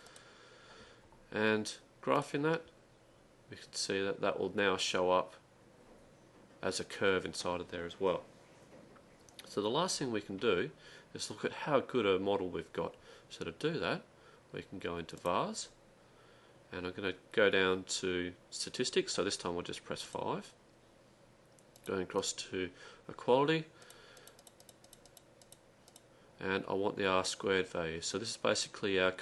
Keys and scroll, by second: 0.0-0.2 typing, 19.9-20.6 typing, 23.9-25.3 typing.